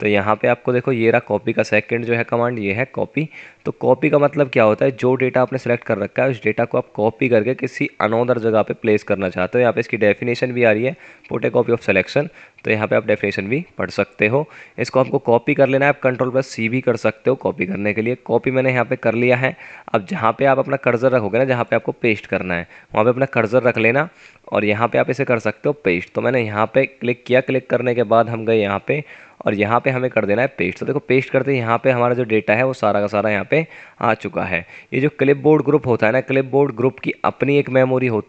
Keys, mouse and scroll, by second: 19.1 F9, 20.2 scroll down 1, 30.3 F9, 35.3 typing.